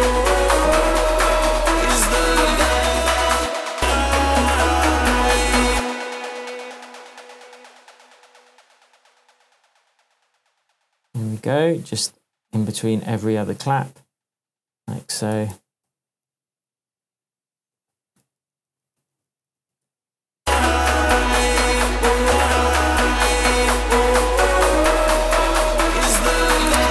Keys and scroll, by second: 3.3 space, 5.7 space, 15.5 super+d, 18.2 super+d.